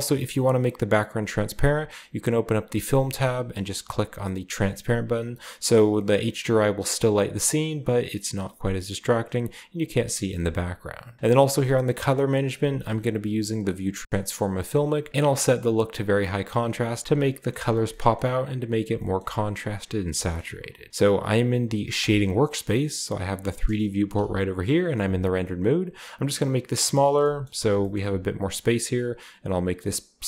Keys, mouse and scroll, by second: 1.1 click, 3.1 click, 4.4 drag, 5.6 click, 11.2-12.1 scroll down 2, 12.1-12.8 scroll down 1, 12.8 click, 13.8 click, 14.7 click, 17.1-18.9 shift+middle drag, 19.1-20.1 shift+middle drag, 20.3-20.9 shift+middle drag, 21.9-24.0 drag, 24.0-24.8 z, 25.7-27.7 drag, 26.9-27.4 scroll down 1, 27.1-28.5 shift+middle drag, 27.7 typing, 28.7-29.7 shift+scroll up 1, 29.7-30.2 drag.